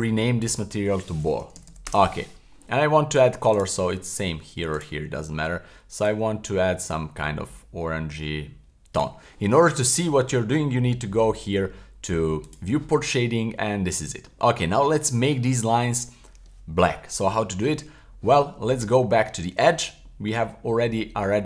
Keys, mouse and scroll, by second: 0.5-1.9 drag, 1.7 l, 3.6 click, 4.7-7.7 drag, 12.5 click, 13.4-14.3 middle drag, 18.5 Tab, 20.1 middle click, 20.5-20.9 scroll up 1, 20.9 middle click.